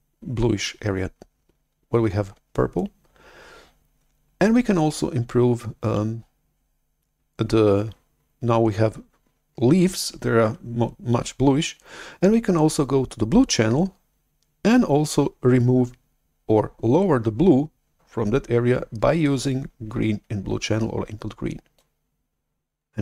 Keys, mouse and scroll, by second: 21.7-23.0 drag.